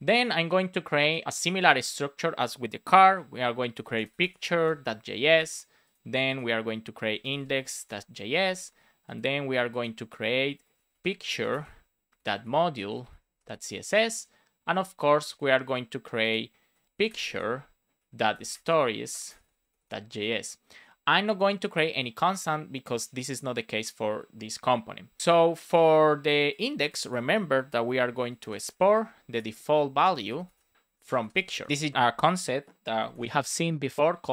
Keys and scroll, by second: 3.0 shift+p, 4.7 Return, 8.0 Return, 10.6 shift+p, 14.1 Return, 16.8 shift+p, 19.0 BackSpace, 20.1 Return, 28.6-29.9 typing, 30.7 Right, 31.0 space, 31.7 BackSpace, 31.8 space, 33.0 space, 34.0 space.